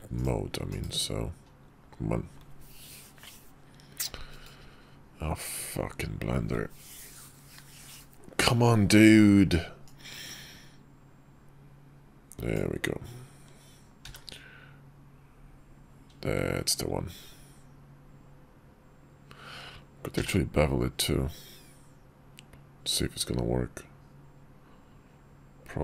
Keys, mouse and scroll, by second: 9.6-12.3 drag.